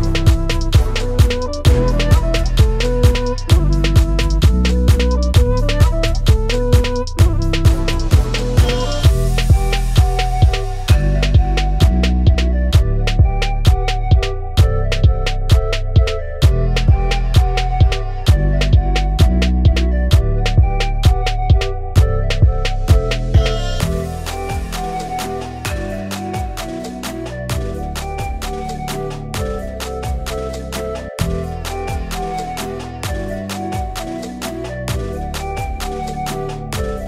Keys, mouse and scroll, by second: 0.0 middle click, 0.1 ctrl+right click, 0.2 ctrl+right click, 0.5 middle click, 1.0 typing, 1.0 middle click, 1.1 middle click, 1.2 click, 1.4 middle click, 1.6 click, 1.7 ctrl+right click, 1.7 middle click, 1.8 ctrl+right click, 1.9 middle click, 1.9 middle click, 2.1 middle click, 2.2 click, 2.3 typing, 2.4 middle click, 2.5 middle click, 3.0 click, 3.4 f, 3.4 middle click, 3.5 middle click, 3.7 click, 4.0 click, 4.0 f, 4.2 middle click, 4.2 shift+click, 4.3 f, 4.4 click, 4.5 middle click, 4.5 ctrl+middle click, 4.7 shift+middle click, 4.9 click.